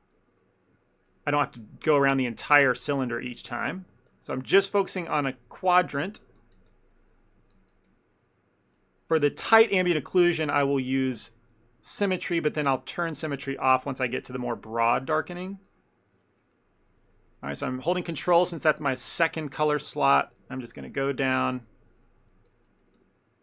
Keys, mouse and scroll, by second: 0.0 ctrl+click, 0.2 ctrl+click, 0.5 middle click, 1.2 ctrl+click, 1.5 ctrl+click, 2.0 ctrl+click, 2.3 ctrl+middle click, 2.6 shift+middle click, 2.8 middle click, 3.1 ctrl+middle click, 3.6 shift+middle click, 4.2 ctrl+click, 4.4 ctrl+click, 4.9 ctrl+click, 5.3 ctrl+click, 5.5 middle click, 6.1 ctrl+click, 6.3 ctrl+click, 6.6 ctrl+click, 6.8 ctrl+click, 7.2 middle click, 7.6 ctrl+click, 7.8 ctrl+click, 8.3 middle click, 9.2 ctrl+click, 9.8 middle click, 10.2 middle click, 10.8 ctrl+click, 11.0 ctrl+click, 11.3 ctrl+click, 11.6 ctrl+click, 12.0 ctrl+click, 12.4 ctrl+click, 12.6 middle click, 13.1 ctrl+click, 13.5 ctrl+click, 14.0 middle click, 14.5 ctrl+click, 14.7 ctrl+click, 15.1 ctrl+click, 15.4 ctrl+click, 15.6 ctrl+click, 16.0 ctrl+click, 16.2 shift+middle click, 16.5 middle click, 16.9 middle click, 17.6 ctrl+click, 17.8 ctrl+click, 18.1 ctrl+click, 18.3 ctrl+click, 18.9 middle click, 19.3 shift+middle click, 19.6 middle click, 20.0 shift+middle click, 20.5 ctrl+click, 20.7 ctrl+click, 21.1 ctrl+click, 21.1 ctrl+click, 21.3 ctrl+click, 21.5 shift+middle click, 21.7 ctrl+middle click, 22.0 middle click, 22.4 ctrl+click, 22.6 ctrl+click, 23.0 ctrl+click, 23.1 ctrl+click, 23.3 middle click.